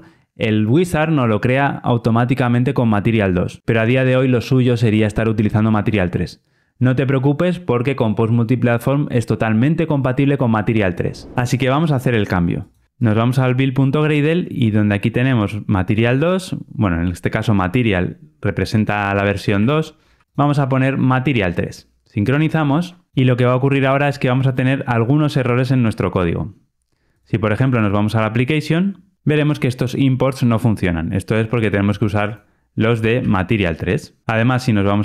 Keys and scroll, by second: 34.2 ctrl+alt+o.